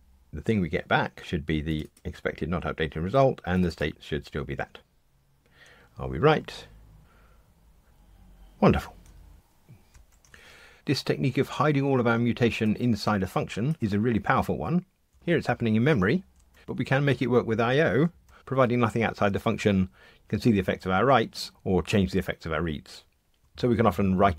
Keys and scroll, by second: 7.0 ctrl+r.